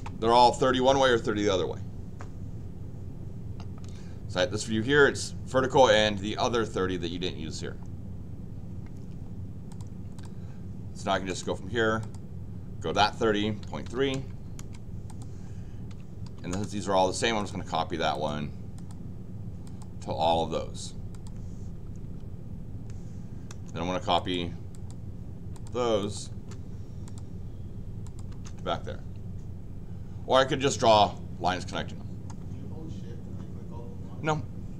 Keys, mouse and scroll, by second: 9.7 click, 10.1 click, 11.0 l, 11.3 Return, 12.0 click, 15.0 click, 15.9 c, 16.2 p, 16.5 Return, 17.4 click, 18.1 click, 18.7 click, 19.6 click, 21.1 click, 22.0 Escape, 23.5 Return, 24.1 click, 24.7 click, 25.5 click, 26.0 click, 26.3 Return, 27.0 click, 28.0 click, 28.3 Return, 31.7 middle click.